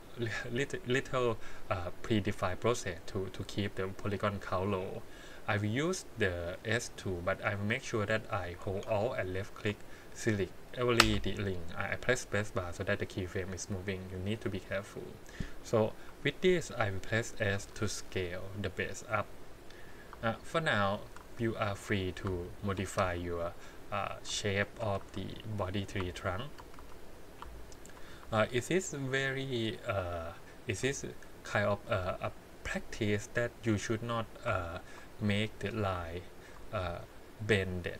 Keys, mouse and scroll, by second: 6.2 middle click, 7.9 click, 8.6 space, 9.1 alt+click, 11.0 space, 12.3-14.3 drag, 16.0 KP_1, 17.5 s, 19.7 click, 20.7 alt+click, 21.2 s, 22.6 alt+click, 23.0 s, 24.6 alt+click, 25.0 s, 26.4 alt+click, 26.8 s, 27.7 alt+click, 28.2 s, 31.3 alt+click, 31.9 s, 34.7 alt+click, 35.3 r, 36.3 alt+click, 36.8 r.